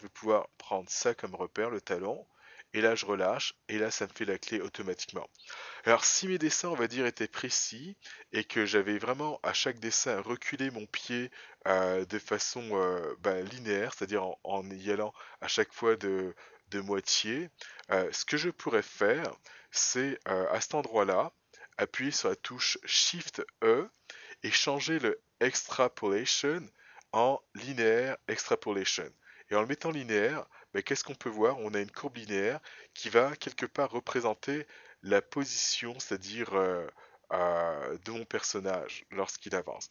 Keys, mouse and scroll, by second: 11.3 click, 18.4 click, 23.7 shift+e, 34.5 click.